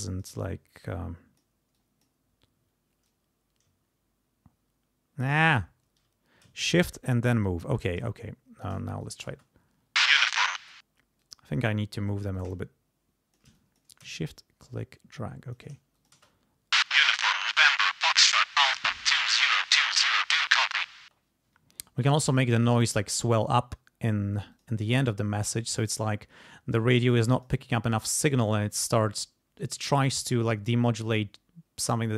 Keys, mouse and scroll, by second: 0.9 click, 1.7 click, 3.0-5.4 drag, 5.8 ctrl+z, 6.9-8.8 shift+drag, 9.0 shift+click, 9.3 shift+space, 10.6 space, 11.2 click, 12.3-13.5 shift+drag, 14.6 shift+click, 15.9 shift+click, 16.1 shift+space, 16.3 shift+middle click, 17.8 ctrl+scroll down 2, 21.0 space, 21.5 d, 22.0 click, 22.9-24.3 drag, 24.5 click, 25.2-27.3 drag, 27.4 click, 27.7-30.4 drag, 31.0-32.1 drag.